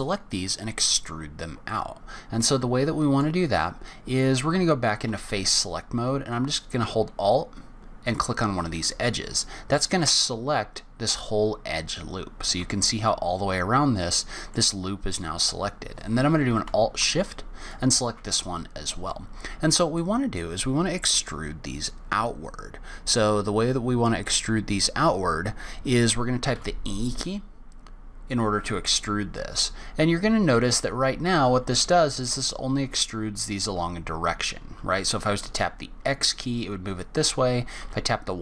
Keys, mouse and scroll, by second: 0.8-1.2 scroll down 3, 1.2-1.7 scroll up 2, 1.7 middle click, 5.1 3, 8.3 alt+click, 12.8 middle click, 14.9-15.6 scroll up 2, 17.6 alt+shift+click, 18.4-19.0 scroll down 2, 19.0 scroll down 1, 19.1 middle click, 26.5 e.